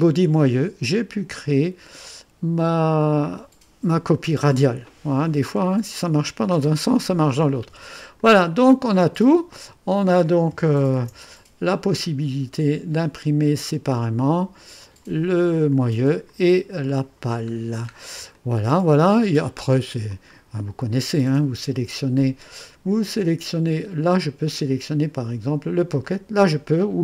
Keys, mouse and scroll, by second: 1.3-1.8 scroll up 3, 8.2 click, 8.9 click, 10.3 click, 11.0 ctrl+d, 12.5 click, 14.0 click, 14.8 click, 15.7 click, 16.3 click, 17.6 scroll down 1, 18.3-19.8 drag, 20.1 click, 23.1 scroll down 1, 24.2 click, 25.4 scroll down 1, 26.0 click.